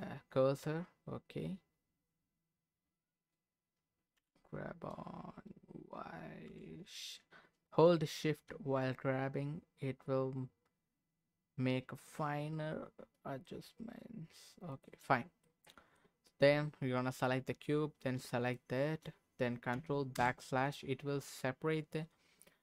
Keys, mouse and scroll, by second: 0.2-0.6 scroll up 2, 1.1-1.8 scroll up 2, 2.6-4.1 scroll up 2, 4.1 g, 6.5 y, 14.7 shift+click, 15.2 scroll down 2, 15.4 middle click, 18.4 shift+click, 20.1 ctrl+KP_Divide.